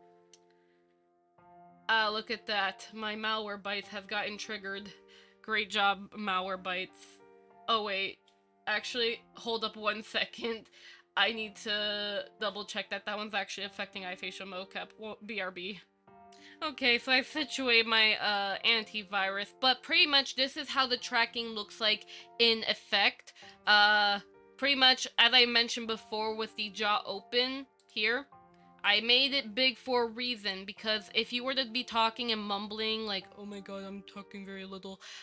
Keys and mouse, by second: 17.6 click, 18.6 shift+middle click, 23.2 middle click, 24.8 KP_5, 28.0 click, 29.1 click, 30.6 click.